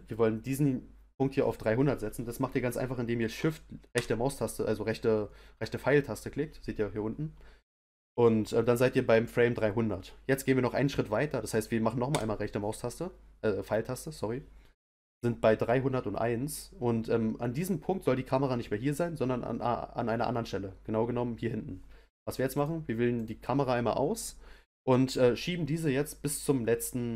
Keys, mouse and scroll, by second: 3.9 Right, 12.1 Right, 22.5 click, 23.1 click, 26.8 middle click.